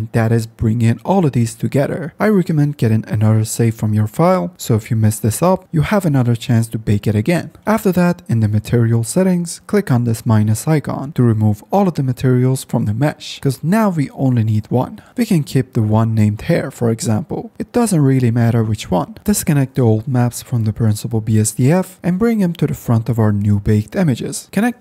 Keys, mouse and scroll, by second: 10.3 click, 10.5 click, 10.8 click, 11.0 click, 11.2 click, 11.3 click, 13.4-16.4 drag, 19.2 ctrl+z, 24.5-24.8 drag.